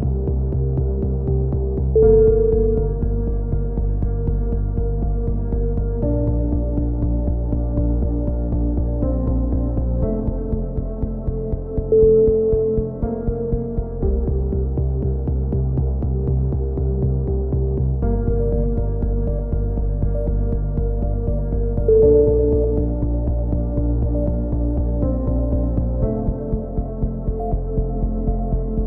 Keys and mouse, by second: 6.5 Tab, 6.7 right click, 6.9 x, 8.2 click, 8.5 right click, 8.9-13.0 typing, 9.7 click, 10.2 click, 10.8 click, 11.4 right click, 11.7 click, 12.2 right click, 13.2 click, 14.7 click, 14.7-16.5 right drag, 15.4-16.7 typing, 16.7 click, 22.0 right click, 22.7 KP_3, 22.8 z, 23.2 e, 23.6 click, 24.3 a, 24.9 click, 24.9 z, 27.3 right click, 28.1 click, 28.4 KP_1, 28.7 z.